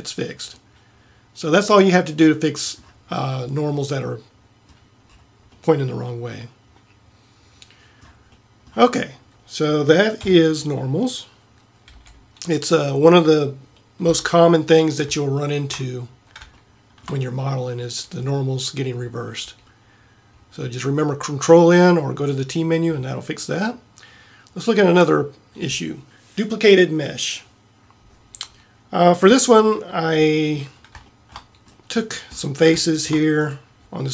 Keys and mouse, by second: 4.3-7.5 middle drag, 8.4-10.3 middle drag, 10.3 KP_7, 12.0 n, 14.1 t, 32.4-33.0 middle drag, 33.5-34.1 right drag.